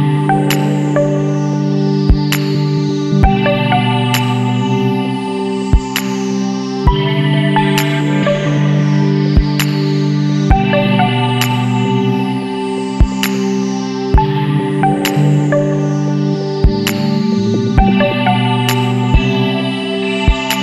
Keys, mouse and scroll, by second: 3.2 click, 4.7 click, 6.3 click, 7.9 click, 8.5 click, 9.5 KP_2, 9.9 KP_Decimal, 10.2 KP_5, 11.6 click, 12.1 click, 13.1 KP_4, 13.4 KP_Decimal, 13.6 KP_5, 15.1 click, 16.3 middle click, 16.5-17.6 drag, 18.0 scroll down 1, 18.7 scroll up 1.